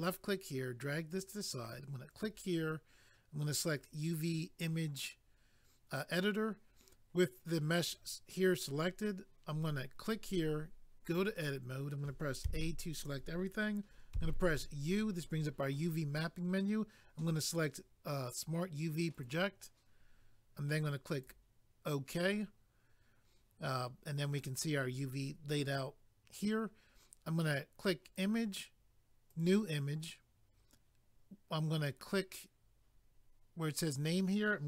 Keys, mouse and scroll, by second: 2.1 click, 2.2 click, 3.9 click, 10.0 click, 10.1 click, 11.0 click, 11.1 click, 12.4 a, 19.1 click, 21.1 click, 28.0 click, 28.1 click, 29.3 click, 29.4 click, 33.9 click, 34.1 click.